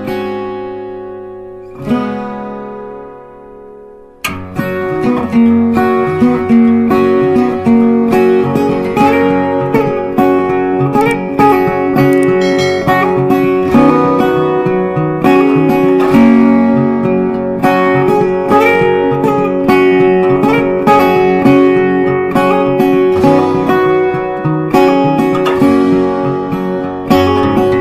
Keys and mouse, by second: 1.0-4.3 typing, 5.6 click, 7.5 Right, 11.5 click, 12.8 ctrl+v, 14.4-19.8 drag, 19.8-27.8 drag.